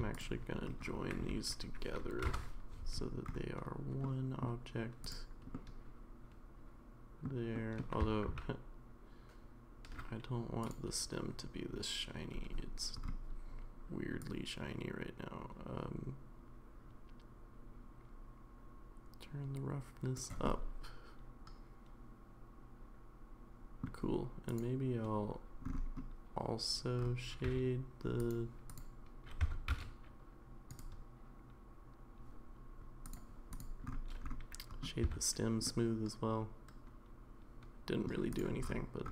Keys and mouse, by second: 0.1 shift+click, 1.2 space, 4.0-4.4 middle drag, 5.0 click, 5.6-7.3 middle drag, 7.5 middle drag, 8.3 ctrl+z, 10.6 click, 14.2-20.1 drag, 20.5-23.8 middle drag, 24.5 click, 27.5 a, 28.2 click, 29.4 Tab, 29.7 a, 30.9-33.1 right drag, 33.6 click, 35.0 Tab, 35.6-38.0 middle drag.